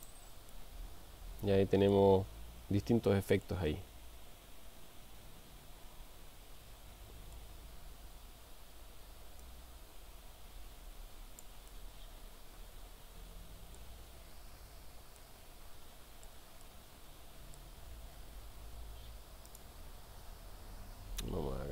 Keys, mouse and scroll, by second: 0.5-2.0 middle drag, 3.5-7.5 middle drag, 9.6-11.6 drag, 11.8-13.9 middle drag, 15.2-16.5 middle drag, 16.6-17.7 middle drag, 19.5 click.